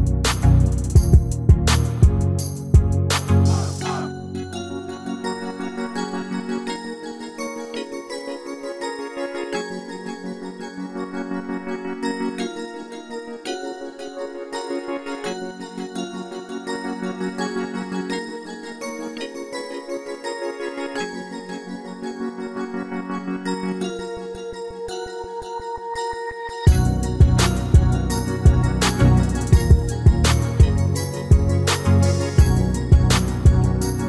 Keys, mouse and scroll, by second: 1.5-3.3 drag, 3.3-6.3 middle drag, 6.0 s, 7.7-11.0 middle drag, 11.3-13.2 drag, 14.3 KP_7, 17.9 s, 24.2-25.9 drag, 25.9-28.0 middle drag, 27.1-29.0 drag, 28.6-30.5 middle drag, 30.3-32.2 drag.